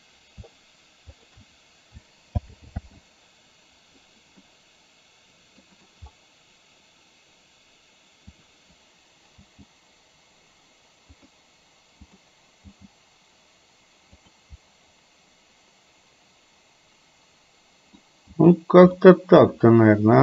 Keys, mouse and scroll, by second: 1.3 shift+click, 2.4 alt+g, 2.8 alt+r, 4.6-5.7 middle drag, 5.8 middle drag, 8.4 click, 9.6 g, 12.1 click, 12.7 g, 14.7-18.1 middle drag, 19.1 middle click.